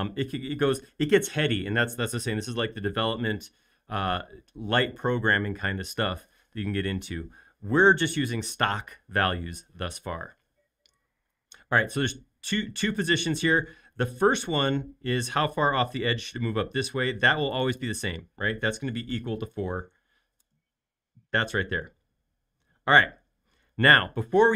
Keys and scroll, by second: 19.0-20.0 typing, 20.4 Return.